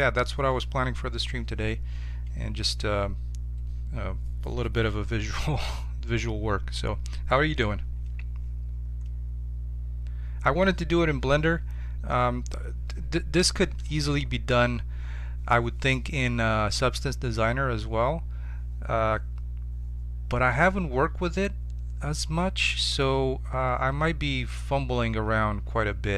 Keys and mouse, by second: 8.8-13.0 middle drag.